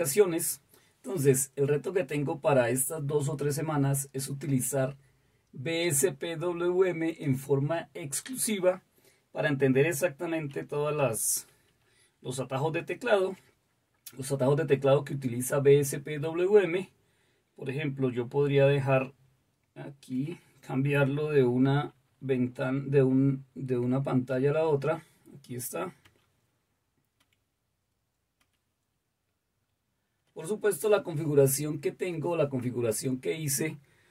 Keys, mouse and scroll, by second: 11.8 shift+super+h, 19.5 super+t, 24.4 shift+super+l, 27.2 shift+super+h, 27.2 shift+super+l, 28.4 shift+super+l.